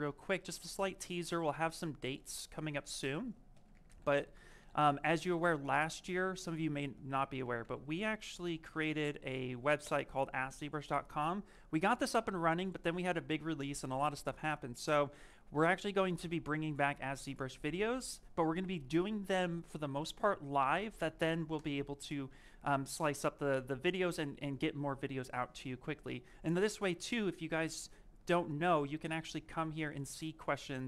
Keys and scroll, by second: 4.6 u, 6.0 BackSpace, 7.8 z, 9.7 Return.